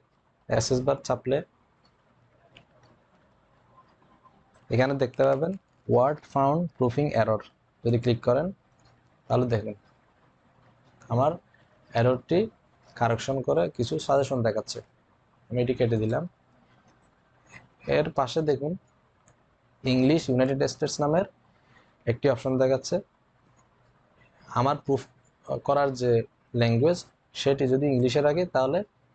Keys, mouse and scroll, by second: 9.0-9.7 typing, 9.2 click, 15.5-16.3 typing, 15.8 click, 15.8 click.